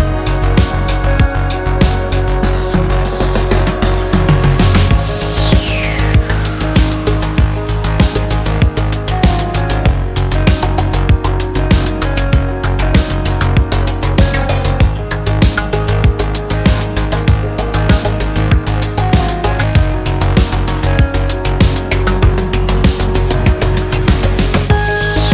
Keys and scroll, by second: 3.0-5.8 typing, 7.0 x, 7.6 space, 7.8 x, 8.2 ctrl+z, 9.5 ctrl+j, 12.1 ctrl+j, 12.5 ctrl+m, 16.0 Escape.